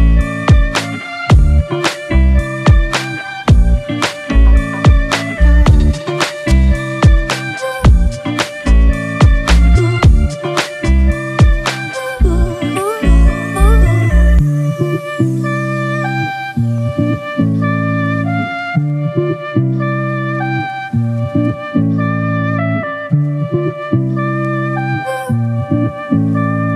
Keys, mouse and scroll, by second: 6.4 double click, 15.6 ctrl+click, 16.2 right click.